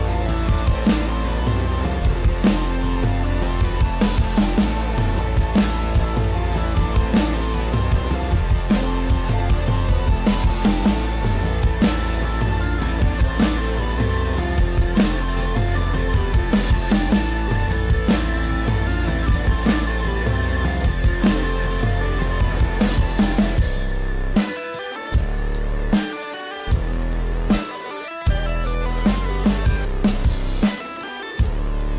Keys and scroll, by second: 19.0 space, 25.6 space.